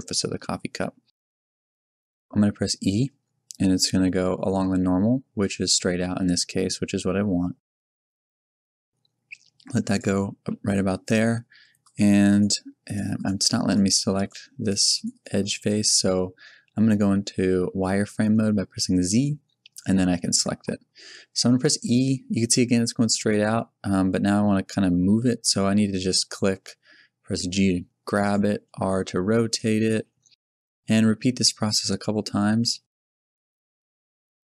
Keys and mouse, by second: 2.9 e, 10.0 click, 18.3 z, 21.6 e, 27.2 g, 28.6 r, 29.9 g, 30.9 e, 32.6 g, 33.4 r.